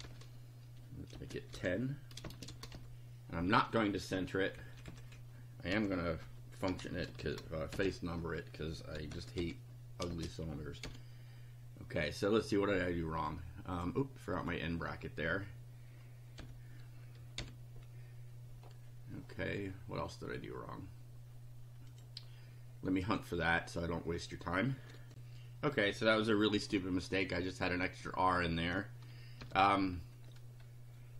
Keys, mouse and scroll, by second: 1.1-3.2 typing, 4.6 BackSpace, 5.7-10.1 typing, 10.8 F5, 13.8 click, 14.4 click, 16.4 ], 17.4 F5, 21.9 click, 23.0 click, 25.1 ctrl+r, 29.4 BackSpace.